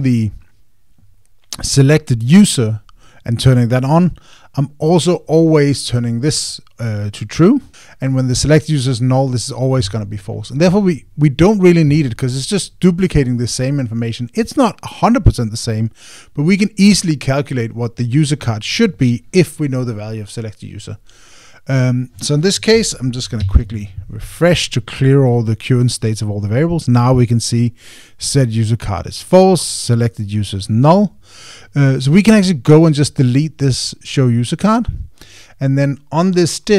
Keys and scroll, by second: 24.2 super+r.